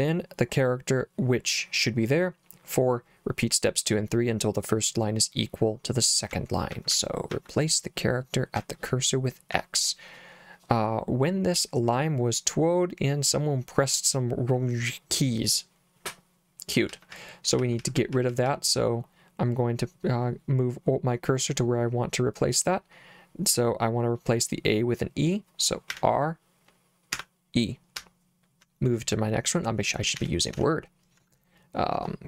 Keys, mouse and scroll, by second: 6.3 j, 6.7 j, 6.9 j, 7.3 j, 8.6 j, 9.5 k, 16.9-18.5 typing, 25.9 r, 27.2 e, 28.0 l, 30.2-32.0 typing.